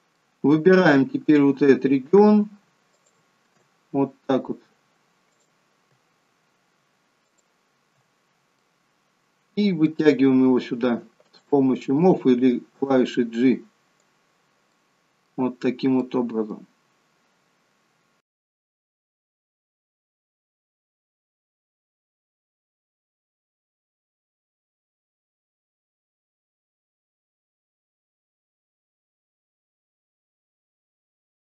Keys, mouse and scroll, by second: 0.4 middle click, 3.1 alt+shift+click, 5.4 click, 7.3 alt+shift+click, 8.6 middle click, 11.4 click, 12.5 click, 14.7 middle click, 15.6-16.1 scroll up 1, 16.1 middle click, 18.7 alt+shift+click, 19.3 click, 19.7 middle click, 20.2 click, 21.7 alt+shift+click, 22.2 middle click, 23.6 click, 24.0 click, 25.5 scroll up 1, 25.5 middle click, 26.0 scroll down 1, 26.2 middle click, 26.7 click, 28.1 middle click, 28.9 scroll up 1, 29.0 middle click, 29.9 alt+shift+click, 30.2 middle click, 30.8 click, 31.4 middle click.